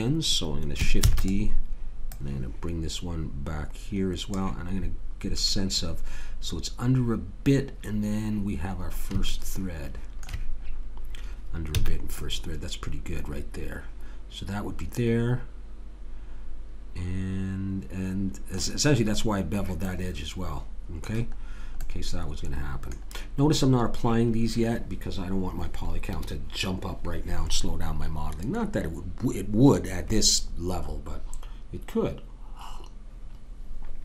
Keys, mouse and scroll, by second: 1.0 shift+d, 4.7-9.7 middle drag, 9.8 click, 10.1-11.8 drag, 11.8 a, 12.2-13.9 middle drag, 19.8-25.2 middle drag.